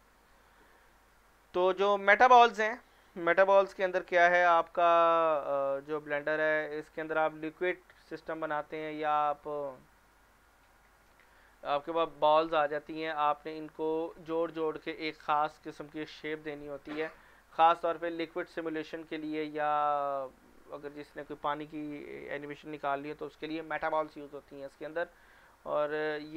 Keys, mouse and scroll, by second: 3.2 click, 8.9 click, 13.7 click, 17.1-19.4 scroll down 1, 25.9 click.